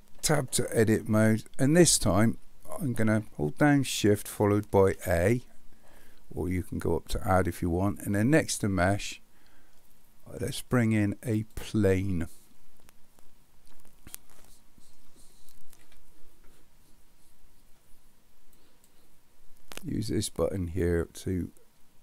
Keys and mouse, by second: 0.3 Tab, 4.8 shift+a, 14.2-14.9 middle drag, 15.8 KP_7, 18.6 click, 20.8-22.0 drag.